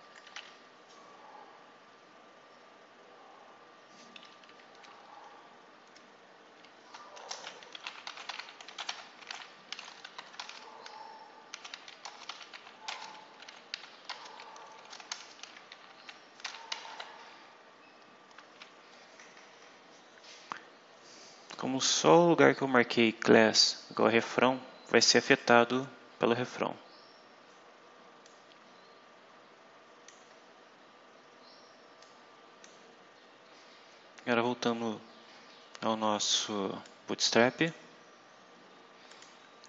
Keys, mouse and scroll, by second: 0.2 Delete, 0.3 1, 6.4 End, 7.1 Return, 7.4-15.6 typing, 16.8 ;, 21.6-22.0 scroll down 2, 25.2 click, 26.5-27.3 scroll up 4, 28.2-30.2 drag, 30.2-30.5 scroll up 1, 31.9 click, 32.9-34.0 scroll down 4, 34.1 scroll up 2, 34.8 scroll up 2, 36.8 click, 39.0 click.